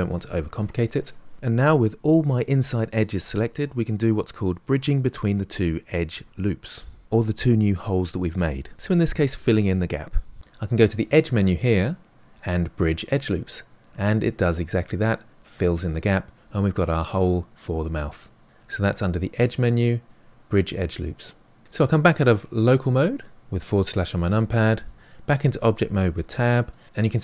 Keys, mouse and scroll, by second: 10.8-13.8 drag, 13.8-16.8 middle drag, 19.3-21.6 drag, 22.6 KP_Divide, 23.7-25.5 scroll down 5, 25.5 Tab, 26.2-26.9 middle drag.